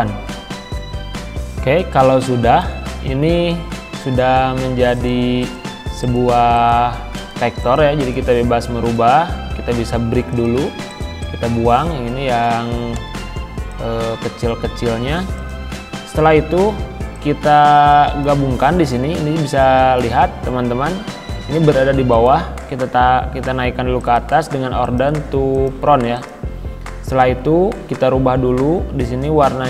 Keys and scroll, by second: 3.4 ctrl+z, 13.0 Delete, 14.9 ctrl+z.